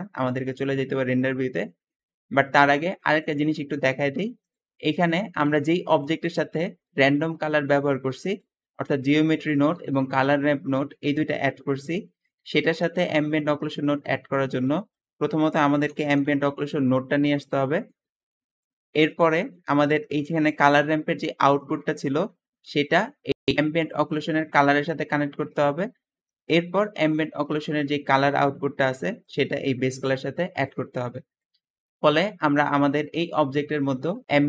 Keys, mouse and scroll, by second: 5.3 g, 5.4 g, 8.6 g, 9.7 g, 12.0 click, 12.3 g, 14.5-16.4 typing, 25.2 middle click, 25.2-25.7 scroll down 2, 29.2-30.5 drag.